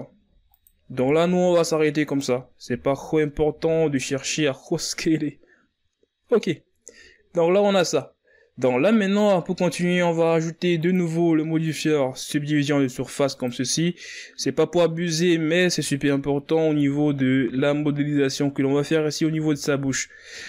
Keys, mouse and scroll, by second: 1.6 e, 3.5 r, 5.4 KP_1, 5.9 z, 6.5-8.1 scroll down 2, 8.1-8.7 scroll down 7, 8.7-9.3 scroll up 4, 9.3 Tab, 9.8-13.0 scroll down 5, 13.3-17.2 drag, 19.5-20.4 scroll up 4.